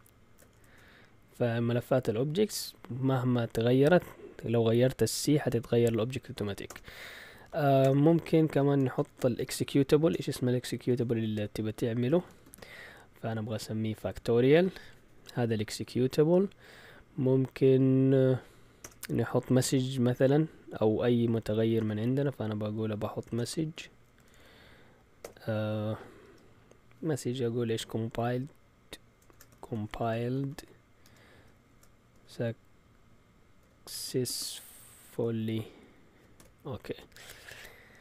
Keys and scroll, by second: 0.0-1.1 typing, 3.7 Up, 5.3 Down, 6.6 Return, 7.8-13.0 typing, 18.8 Return, 21.5-26.7 typing, 29.0-32.1 typing, 33.4-37.9 typing.